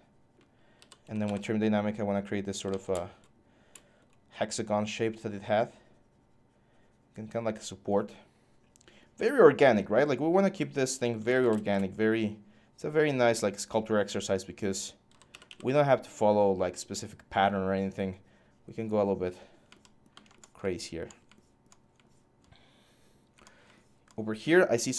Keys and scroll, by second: 0.3-1.5 typing, 2.4 ctrl+z, 10.7-11.6 typing, 14.6-15.7 typing.